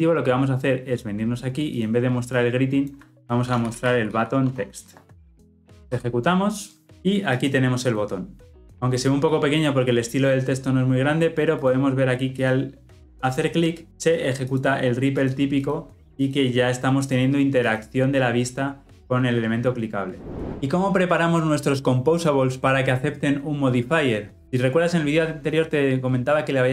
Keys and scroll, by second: 5.6 Return, 5.7 shift+F10.